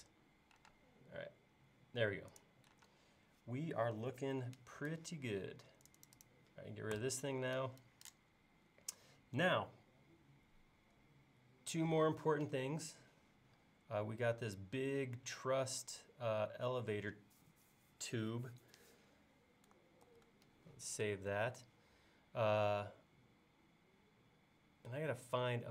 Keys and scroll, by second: 0.7 typing, 2.9 space, 7.0 BackSpace, 20.1 super+s.